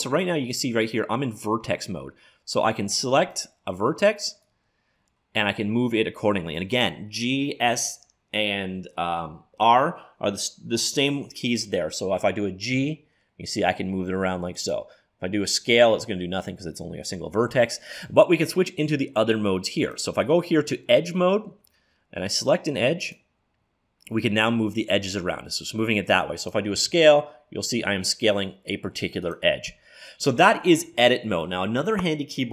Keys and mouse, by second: 3.2-6.3 right drag, 12.8 g, 19.8-21.7 drag, 22.3 click, 24.1 click, 25.1-27.0 drag, 26.8 s.